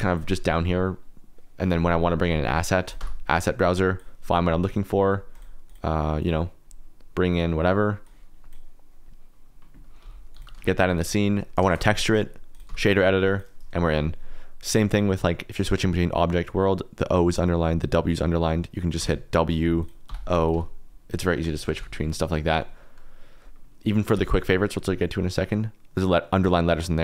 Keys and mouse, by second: 1.0 middle click, 3.0 click, 3.7 click, 4.6 click, 5.3 click, 5.6 click, 6.2 click, 10.6 shift+z, 11.7 shift+z, 12.5 click, 13.2 click, 13.4 KP_Decimal, 14.9-16.3 drag.